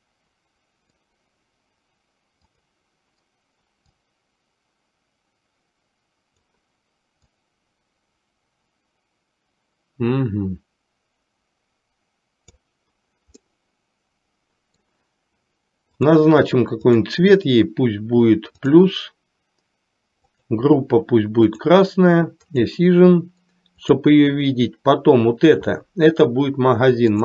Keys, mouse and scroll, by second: 0.0-1.2 middle drag, 4.0-12.9 drag, 13.5-15.0 middle drag, 16.9 click, 20.4-21.9 drag, 22.5 click, 23.9 click.